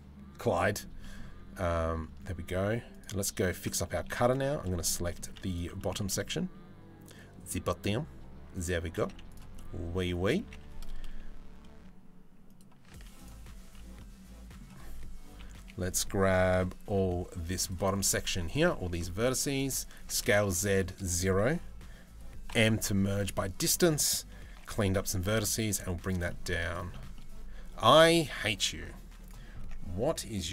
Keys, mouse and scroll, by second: 0.6 middle click, 1.2 Tab, 1.8 Tab, 2.5 click, 3.5 3, 4.5 middle click, 4.9 z, 5.4 middle click, 5.6 a, 5.8-7.6 middle drag, 8.6 z, 9.2 middle click, 10.0 g, 12.6 z, 13.3 a, 13.6 middle click, 15.0 KP_3, 16.5 b, 17.5 click, 17.9 1, 18.5 b, 19.6 s, 22.1 m, 24.1 g, 25.4 z, 25.9 middle click, 26.8 middle click, 28.3 Tab, 29.2 Tab, 29.6 middle click.